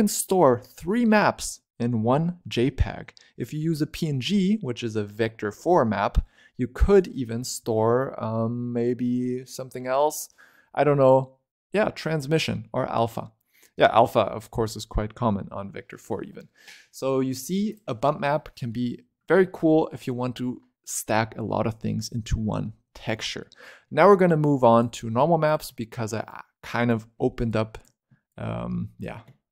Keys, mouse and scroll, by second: 17.6 click, 18.3-21.5 scroll up 3, 22.1-22.7 scroll down 4, 22.7-23.1 scroll up 3, 23.1 middle click, 23.6 scroll down 3, 23.7 middle click, 24.5 click, 25.0-25.3 scroll up 3, 25.3 click, 25.6 middle click, 26.2 click, 27.4 click, 28.2 click, 29.4-29.5 scroll down 6.